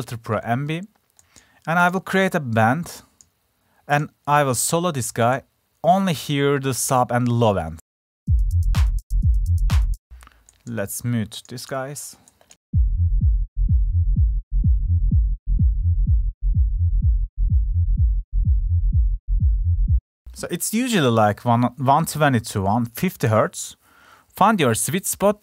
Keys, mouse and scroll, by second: 10.7 click.